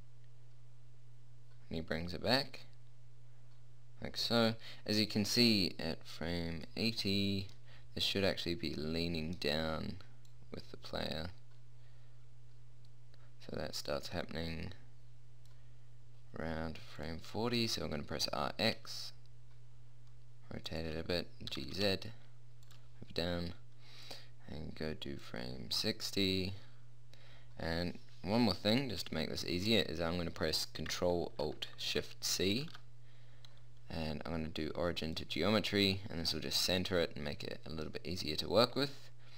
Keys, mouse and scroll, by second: 0.8 middle click, 10.6 middle click, 12.4-14.9 middle drag, 17.3-19.2 drag, 18.2 r, 21.8 g, 24.4-26.2 middle drag, 32.7 ctrl+alt+shift+c, 37.0-39.0 middle drag.